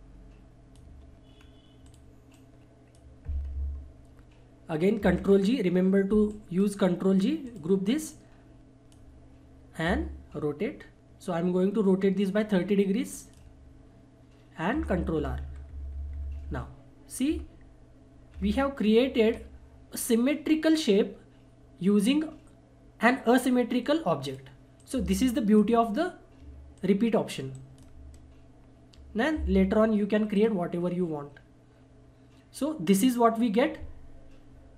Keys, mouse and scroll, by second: 1.3-1.8 scroll down 1, 1.8-5.0 drag, 5.0 ctrl+g, 6.3-13.1 drag, 13.1 ctrl+right click, 14.7 ctrl+r, 24.2 ctrl+r, 24.5-26.7 drag, 26.7 shift+click, 27.5 shift+right click, 30.3 shift+right click, 31.7 click.